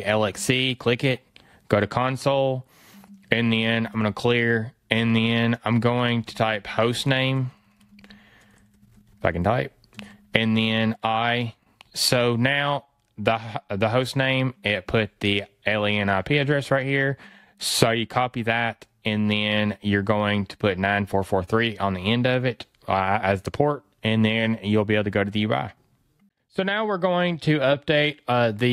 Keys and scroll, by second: 7.3 BackSpace, 18.1 super+c.